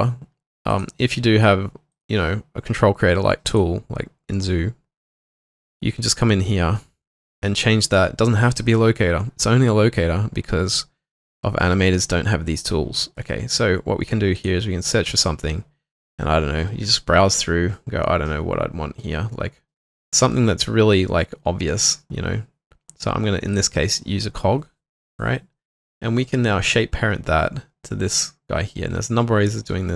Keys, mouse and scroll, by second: 6.8 alt+middle click, 12.1 alt+middle click, 22.9-24.8 scroll up 1.